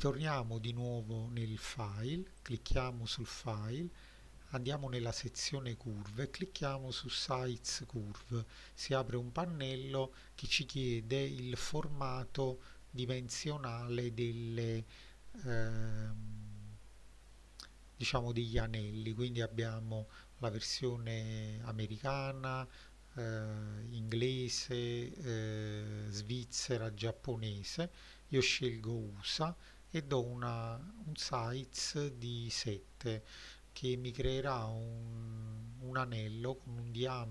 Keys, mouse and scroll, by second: 0.6-1.0 middle drag, 1.4 click, 2.4 click, 7.7-37.3 drag.